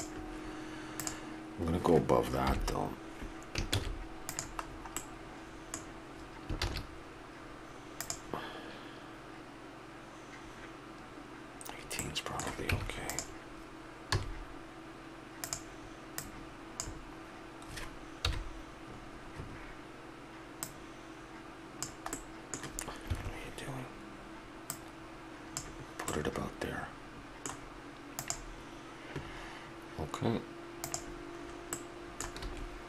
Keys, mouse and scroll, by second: 1.0-2.4 right drag, 2.4 KP_7, 3.7 shift+s, 4.6-6.0 middle drag, 6.6 shift+a, 11.6-13.7 middle drag, 12.6 Tab, 14.1 s, 16.3-18.0 drag, 18.2 KP_1, 20.6-22.5 drag, 24.6-26.1 drag, 26.1-27.8 middle drag, 31.5 middle click, 32.4 s.